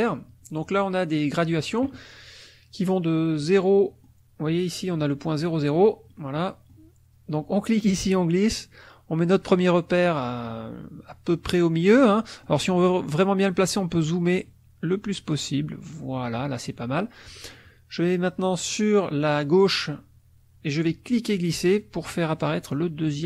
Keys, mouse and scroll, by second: 3.4 middle click, 6.1 middle click, 7.8-11.6 drag, 11.8 middle click, 12.5 middle click, 14.4-16.4 drag, 20.9-23.2 drag.